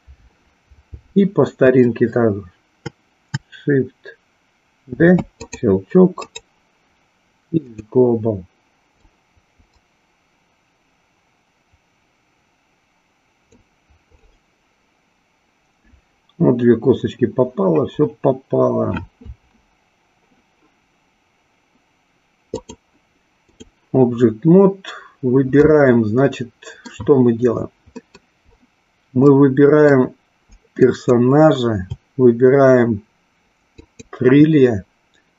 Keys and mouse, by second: 4.8 shift+d, 6.2-7.9 right drag, 8.9-13.4 drag, 22.6-23.7 drag, 25.6-26.9 middle drag, 28.0 middle click, 29.2-29.8 middle drag, 30.7 click, 33.7 shift+click.